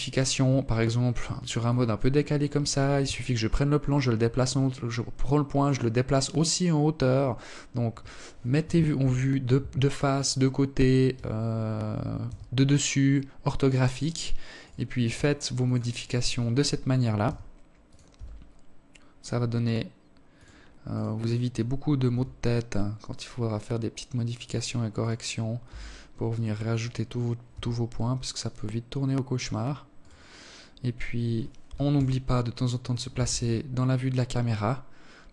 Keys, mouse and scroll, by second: 0.2 alt+click, 1.5 g, 7.5 KP_7, 10.7 g, 13.1 right click, 13.5 g, 14.8 right click, 15.7 g, 16.6 s, 19.4 right click, 20.6 r, 23.5 right click, 24.1 s, 26.0 g, 28.5 right click, 29.5 scroll down 2, 30.5 KP_0, 31.7 Tab.